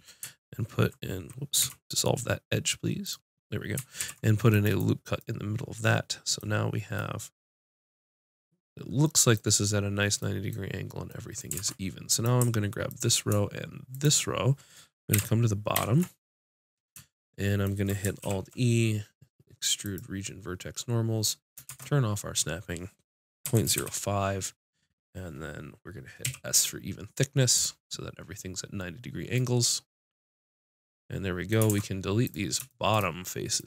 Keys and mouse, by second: 1.6 x, 3.9 ctrl+r, 6.3 click, 11.5 ctrl+Tab, 12.8-15.7 drag, 15.1 KP_7, 15.7 ctrl+KP_7, 18.2 alt+e, 27.6-29.3 drag, 31.7 ctrl+Tab.